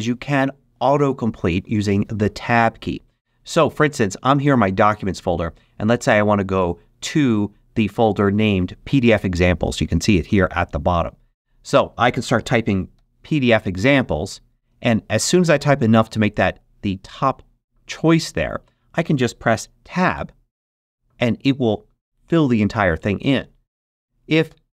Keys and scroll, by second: 12.8 shift+p, 13.7 shift+d, 20.5 Tab, 24.4 super+BackSpace.